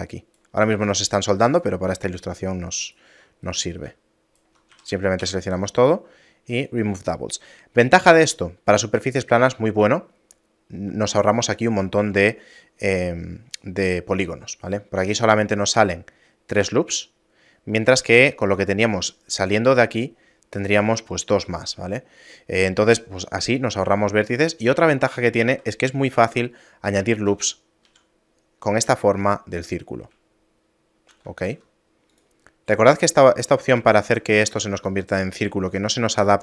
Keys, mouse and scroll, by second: 0.9 right click, 1.1 right click, 2.1 right click, 3.6 right click, 4.7 a, 5.2 w, 25.5 ctrl+r, 30.4 shift+middle click, 31.4 ctrl+r, 34.0 shift+middle click, 34.5 ctrl+r.